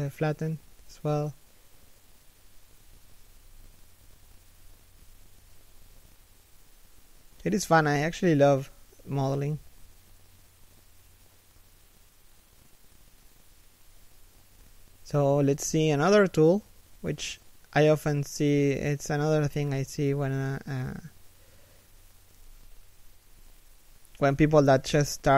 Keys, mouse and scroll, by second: 0.3 alt+shift+middle click, 2.8 a, 3.7 middle click, 4.4 3, 4.9 1, 5.5 alt+shift+middle click, 5.8 scroll up 1, 7.4 z, 8.3 shift+middle click, 9.1 z, 10.8 right click, 12.5 scroll down 1, 12.9 alt+shift+middle click, 13.6 alt+right click, 13.8-16.6 typing, 16.3 scroll up 1, 16.8 middle click, 18.4-19.6 typing, 21.8 z, 23.5 alt+right click, 24.0 g.